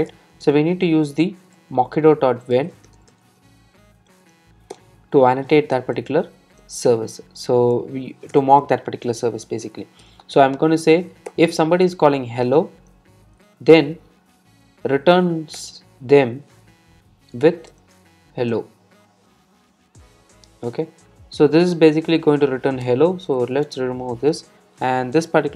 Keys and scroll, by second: 4.8 Return, 15.6 Return, 24.6 super+s.